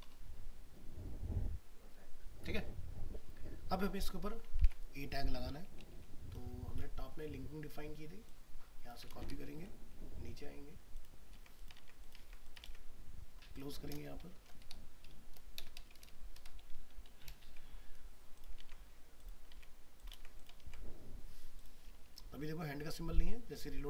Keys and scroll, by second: 4.6 alt+Tab, 6.0 ctrl+End, 9.1 ctrl+c, 9.5 ctrl+End, 11.4 ctrl+v, 17.4 ctrl+c, 18.6 ctrl+v, 20.6 ctrl+s.